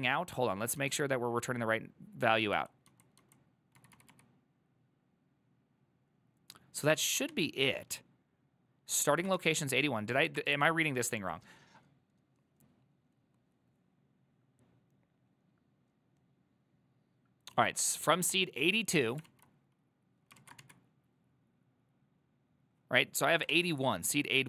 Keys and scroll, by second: 0.9 typing, 2.6-4.2 typing, 7.1 ctrl+a, 7.4 2, 9.2 ctrl+a, 9.5 1, 19.4 alt+{, 20.5 ctrl+a, 20.7 2, 23.6 alt++.